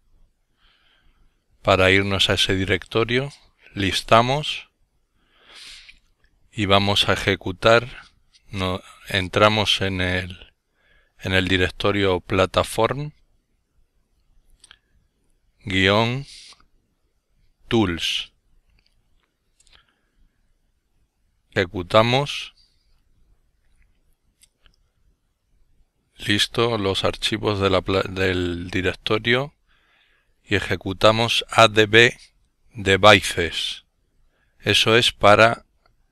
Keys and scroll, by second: 0.2-1.7 typing, 4.4-9.8 typing, 12.1-15.6 typing, 15.7 Return, 21.8-22.2 typing, 23.5-24.9 typing, 27.2 typing, 28.4-29.9 typing, 31.4-34.5 typing, 34.8 Return.